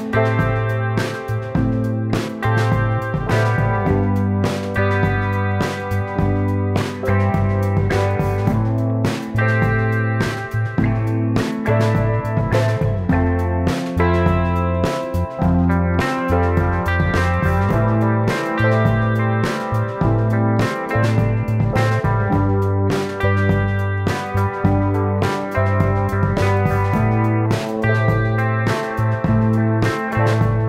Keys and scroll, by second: 2.5 space, 9.1 super+z, 9.3 space, 21.2 space, 24.9 super+z, 25.9 t.